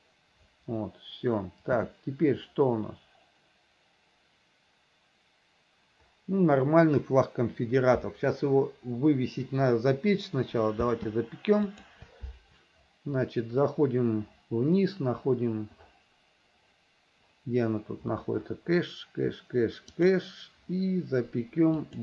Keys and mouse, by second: 0.0 click, 1.9 space, 11.0 space, 11.8 click, 20.1 click, 21.9-22.0 drag.